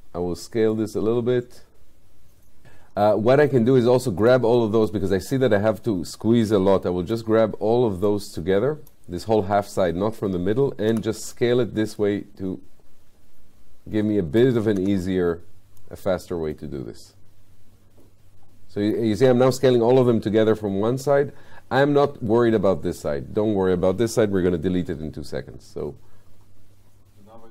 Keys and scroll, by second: 10.9 r, 14.8 w.